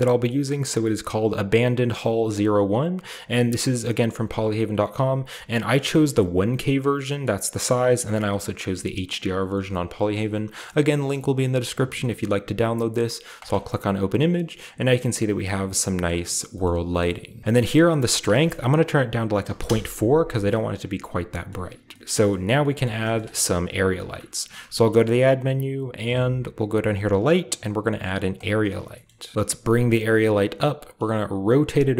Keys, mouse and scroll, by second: 3.1 click, 4.1 click, 5.0 click, 6.1 click, 7.8 click, 8.5 click, 9.0 click, 9.6 click, 13.3 click, 14.1-15.9 scroll down 2, 14.4-14.8 middle drag, 16.0-16.5 middle drag, 16.6-17.4 shift+middle drag, 16.7-17.4 scroll up 2, 18.2 click, 19.5 typing, 19.8 Return, 20.3 middle click, 20.3-21.5 scroll down 1, 20.5-21.2 middle drag, 20.7-21.1 typing, 21.5-24.1 scroll up 2, 22.5 typing, 24.3 scroll up 1, 24.6 a, 28.3 click, 28.8-29.3 scroll down 1, 28.9-30.4 middle drag, 29.3-30.3 scroll up 1, 29.6 g, 30.3 click, 30.3-30.9 scroll up 1, 30.9 scroll up 1, 30.9 r.